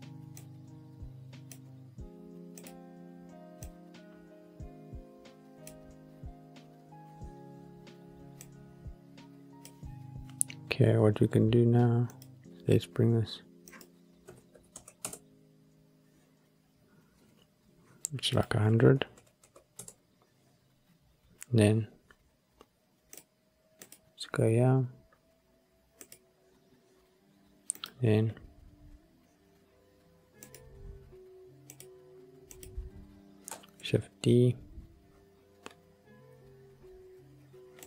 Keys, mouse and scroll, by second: 1.1-2.6 middle drag, 2.6 drag, 8.3-9.6 drag, 12.0 click, 13.6-15.1 drag, 18.2-19.7 drag, 19.3 KP_0, 23.8 click, 25.9 click, 28.1 click, 28.3-30.5 scroll down 3, 30.5 click, 31.6 click, 32.4 click, 33.7 shift+d, 37.7 click.